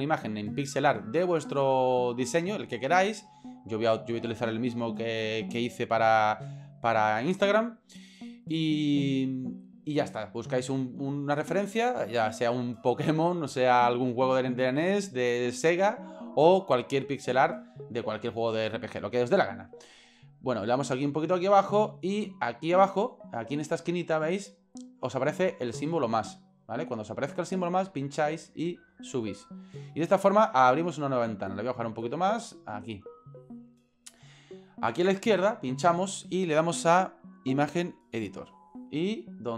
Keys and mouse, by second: 20.6-21.7 drag, 28.0-29.7 drag, 31.6 click, 32.9 click, 35.7-38.0 drag.